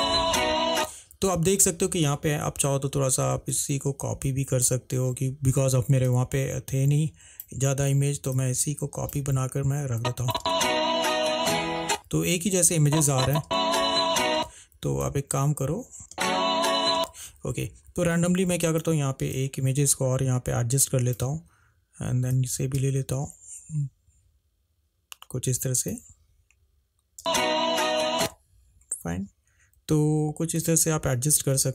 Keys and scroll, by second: 0.9 space, 10.5 space, 13.6 space, 16.0 Delete, 16.2 space, 27.3 space, 31.6 =.